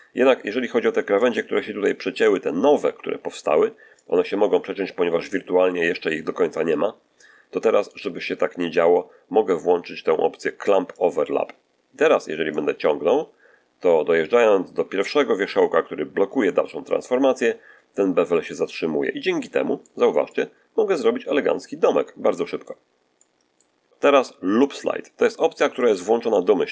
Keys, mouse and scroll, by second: 3.9-7.9 drag, 10.8 click, 12.4-18.5 drag, 19.3 middle click, 20.1-22.7 middle drag, 23.0 middle click, 25.7 click.